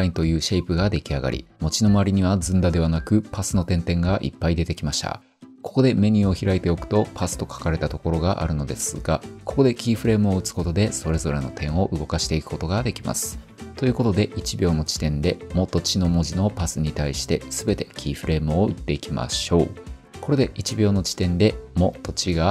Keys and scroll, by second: 1.3 typing, 21.0 u.